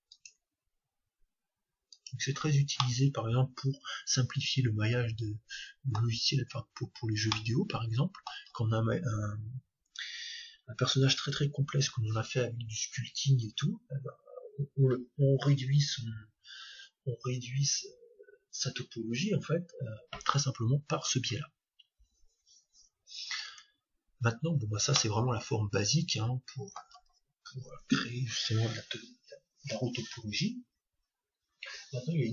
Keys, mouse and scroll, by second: 3.0-4.5 middle drag, 7.6-9.2 middle drag, 23.5 Tab, 25.0-26.8 middle drag.